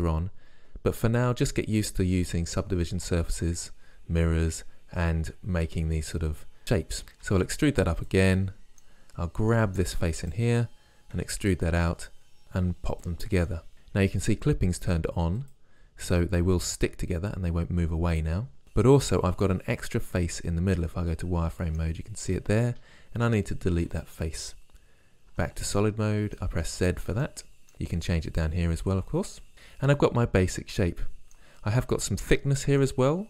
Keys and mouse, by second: 7.3 e, 8.4-12.0 drag, 11.2 e, 13.5 click, 17.0 click, 17.3-18.8 drag, 19.1 z, 21.7 middle click, 23.2 Delete, 25.4 z.